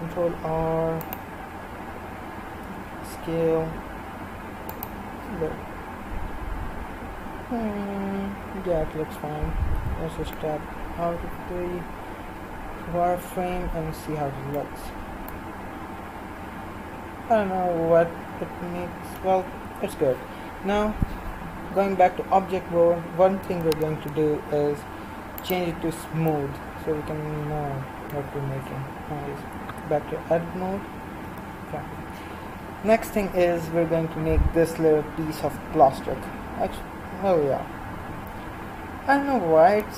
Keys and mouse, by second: 9.8 z, 10.4-11.9 middle drag, 15.4-18.0 middle drag, 19.6 Tab, 25.5-27.5 drag, 26.7-29.7 middle drag, 29.7 Tab, 31.3 KP_1.